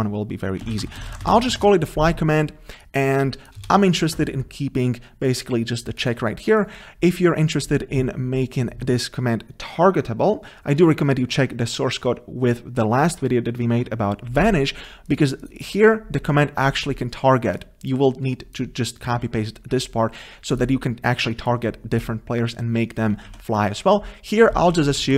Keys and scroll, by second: 1.0 ctrl+BackSpace.